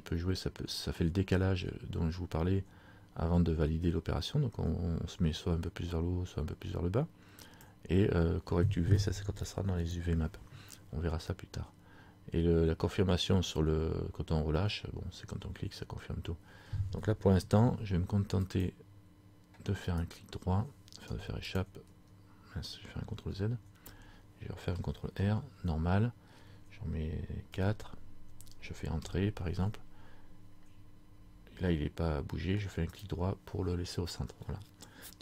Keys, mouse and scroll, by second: 18.5 click, 21.2 Escape, 21.8 click, 22.1 Escape, 23.5 ctrl+z, 25.2 ctrl+r, 33.1 right click.